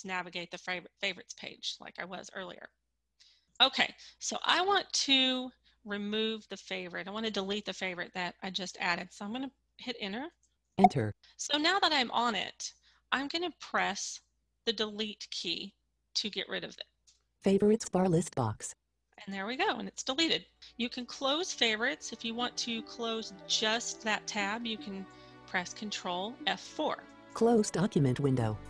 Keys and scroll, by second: 9.2 Return, 13.9 Delete, 25.2 ctrl+F4.